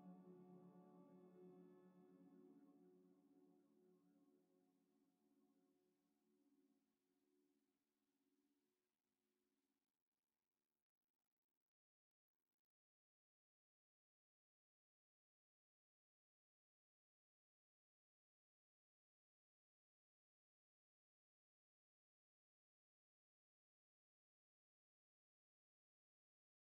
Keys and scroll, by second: 6.9 a, 19.1 z, 22.3 a, 22.9 q, 25.6 ctrl+j.